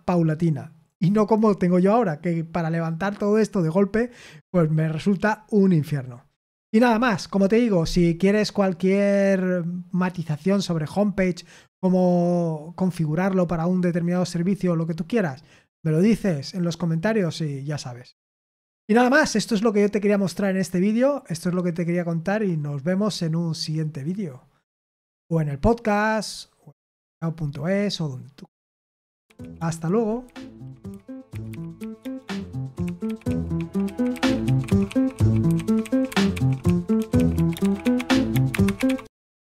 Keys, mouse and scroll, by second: 8.0 click, 29.1 super+x, 39.3 click.